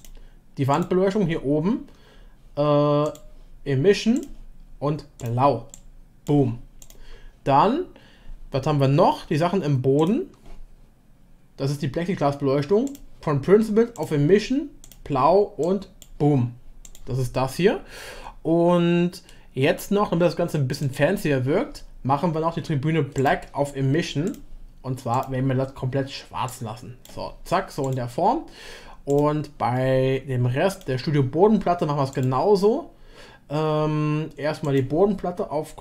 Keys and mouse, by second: 3.1-4.2 drag, 5.2 click, 6.8 click, 9.9 click, 12.9-14.9 drag, 23.3-26.9 drag, 27.8 click, 29.1 click, 32.1 click, 34.7-35.8 drag.